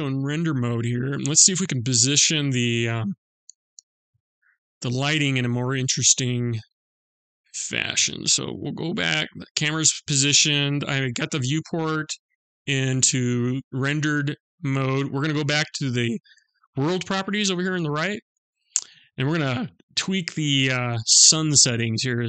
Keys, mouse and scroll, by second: 3.0 middle click, 16.6 click, 21.3 click.